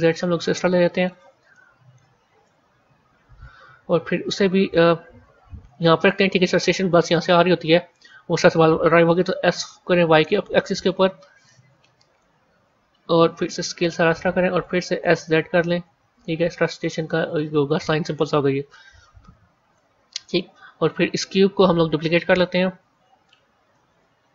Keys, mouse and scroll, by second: 1.4 middle click, 2.3 KP_1, 3.2 KP_3, 4.6 g, 9.0 s, 11.3-13.3 middle drag, 13.3 s, 14.9 s, 18.6-21.6 middle drag, 24.2 scroll down 2.